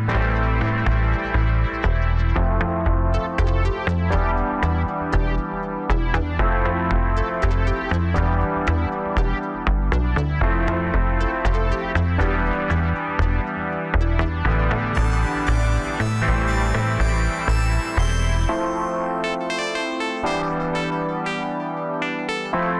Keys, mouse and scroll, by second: 0.9 s, 4.8-6.9 middle drag, 6.9 KP_1, 7.5-8.3 scroll up 1, 8.3 click, 8.8-10.1 scroll up 1, 10.1 shift+d, 12.1 p, 14.7 Tab, 15.7 click, 16.4 Tab, 17.1 a, 18.1 s, 20.8 g, 22.0 s.